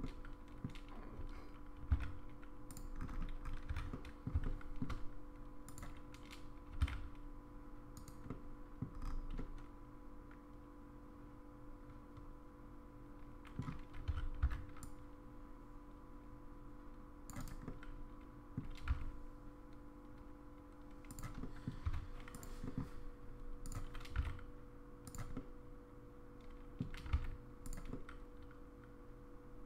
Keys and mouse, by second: 0.0 middle click, 1.2 g, 3.7 1, 3.9 middle click, 4.4 middle click, 5.7 click, 6.7 g, 8.3 middle click, 9.4-13.6 middle drag, 14.1 3, 14.4 c, 17.7 middle click, 18.8 g, 21.4 middle click, 22.6 middle click, 22.6 1, 23.7 click, 24.1 g, 25.3-26.8 middle drag, 27.0 g, 28.0-29.6 middle drag.